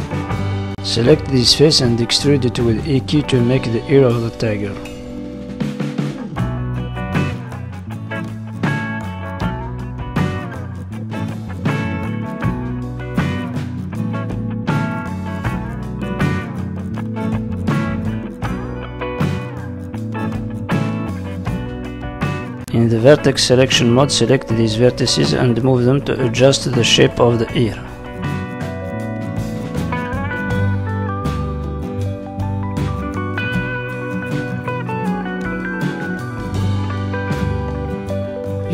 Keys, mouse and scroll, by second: 0.2 click, 0.9 click, 1.1 middle click, 4.4 KP_3, 5.7 z, 7.7 e, 8.9 g, 11.2 o, 13.2 r, 14.6 g, 15.7 s, 15.9 g, 16.8 scroll down 4, 17.1 middle click, 18.0-18.4 scroll up 2, 18.3 z, 19.3 middle click, 21.4-21.7 scroll up 2, 21.7 middle click, 23.0 click, 23.6 click, 23.9 g, 25.1 middle click, 25.9 click, 26.3 middle click, 26.9 click, 28.4 middle click, 29.1 click, 29.5 g, 30.8 middle click, 31.9 click, 32.2 g, 33.6 click, 33.8 middle click, 34.5 click, 35.8 ctrl+z, 36.4 click, 37.1 middle click, 38.0 click.